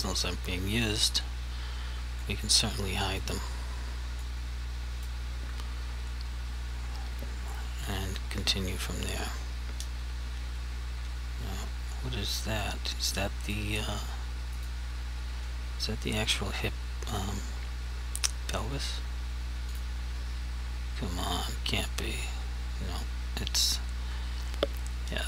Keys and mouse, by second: 1.0 click, 2.3 click, 3.2 click, 4.3 click, 13.5 click.